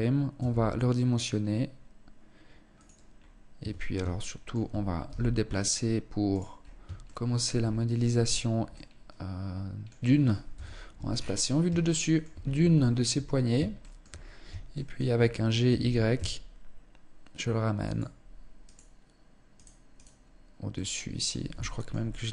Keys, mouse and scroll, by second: 2.6 scroll up 2, 2.6 Tab, 3.3 shift+middle click, 4.5 g, 6.0 scroll up 2, 6.1 shift+middle click, 6.9-7.2 scroll up 1, 8.0 middle click, 10.0 KP_7, 10.5-11.0 scroll down 6, 11.3 shift+middle click, 11.8 scroll up 2, 12.2 shift+middle click, 13.2 shift+middle click, 13.6-14.1 scroll up 2, 14.3 shift+middle click, 15.1 g, 18.2 right click, 19.0 right click, 19.4 right click, 20.2 middle click, 21.2 shift+middle click, 21.5 middle click.